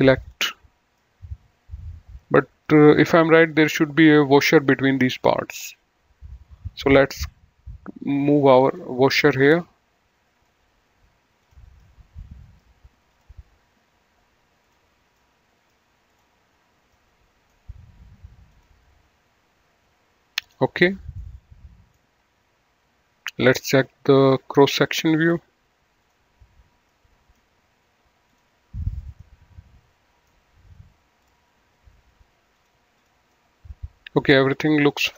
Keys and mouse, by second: 0.2 click, 1.0 middle click, 3.4 click, 5.1 click, 6.7 click, 8.5 click, 11.4 click, 11.6 middle click, 13.1 click, 14.6 click, 15.1 middle click, 15.9 click, 17.0 middle click, 18.4 click, 20.4 click, 21.1 middle click, 23.6 click, 24.8 middle click, 25.9 click, 26.7 middle click, 28.3 click, 29.2 middle click, 31.1 click, 32.4 click, 33.3 middle click.